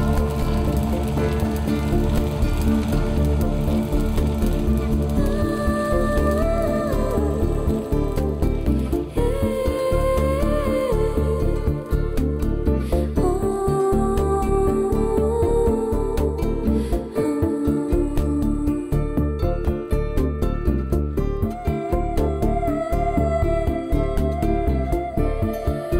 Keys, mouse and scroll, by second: 0.1 g, 0.8 right click, 1.1 middle click, 1.6 shift+middle click, 1.9 scroll up 4, 2.1 middle click, 2.6 shift+middle click, 3.0 middle click, 3.4 shift+middle click, 3.7 middle click, 4.1 shift+middle click, 4.4 scroll down 1, 4.8 middle click, 5.6 shift+middle click, 6.1 scroll up 3, 6.8 click, 7.1 g, 7.8 right click, 8.2 middle click, 9.3 shift+middle click, 9.9 scroll down 4, 10.3 middle click, 10.7 scroll down 1, 10.9 middle click, 14.6 KP_1, 15.2 shift+middle click, 16.4 a, 16.7 a, 17.1 a, 17.6 z, 20.2 z, 21.6 scroll up 3, 21.9 middle click, 22.4 shift+middle click, 23.1 click, 23.2 middle click, 23.6 shift+middle click, 23.9 scroll up 1.